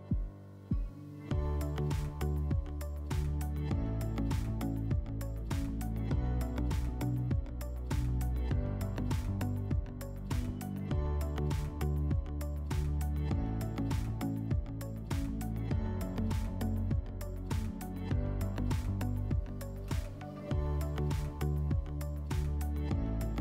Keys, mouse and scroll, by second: 21.8 click.